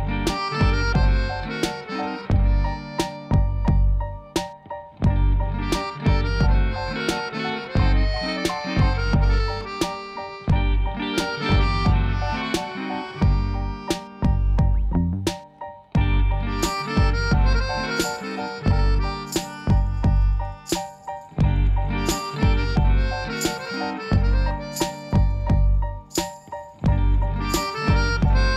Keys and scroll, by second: 10.2 s, 15.6 e, 18.5 Escape, 23.8 Tab, 24.5 ctrl++.